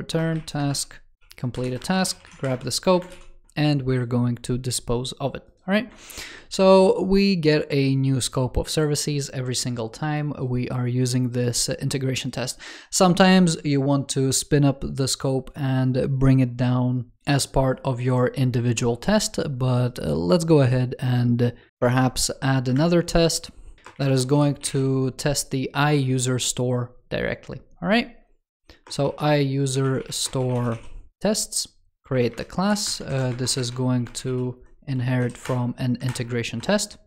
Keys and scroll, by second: 6.5 super+s, 21.7 ctrl+Return, 33.0 super+Right, 36.0 super+Return.